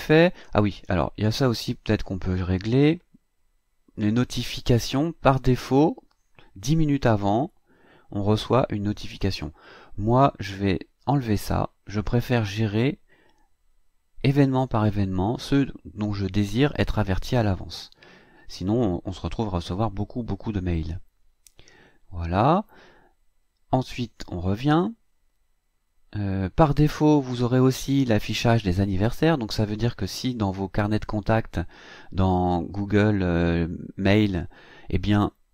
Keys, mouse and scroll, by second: 3.1-3.5 scroll down 1, 11.1 click, 20.0-21.3 scroll down 2, 21.3 scroll down 1, 21.3-21.7 scroll up 2, 22.0-22.8 scroll up 4, 23.1-24.9 scroll up 2, 24.9 click.